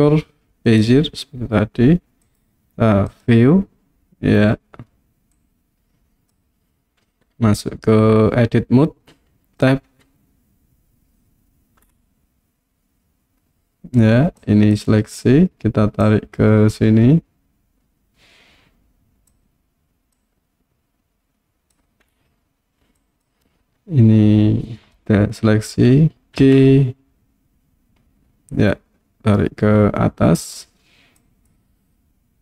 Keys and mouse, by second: 2.3-3.4 drag, 5.5 click, 9.9 Tab, 14.4 click, 16.0-19.3 drag, 20.2-21.8 drag, 23.1 click, 26.4 g, 30.5 click, 31.2 click.